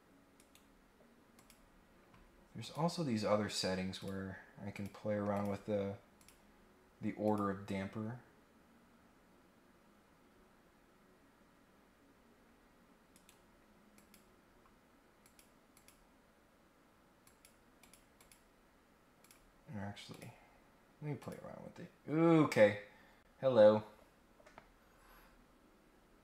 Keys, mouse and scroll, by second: 0.3 right click, 1.3 click, 2.6 click, 3.9 click, 4.7 click, 5.3 click, 6.2 click, 7.2 click, 11.7 scroll up 1, 13.1 right click, 13.9 click, 15.2 click, 15.7 click, 17.2 click, 17.8 click, 18.2 click, 19.2 click, 20.1 click, 21.2 click.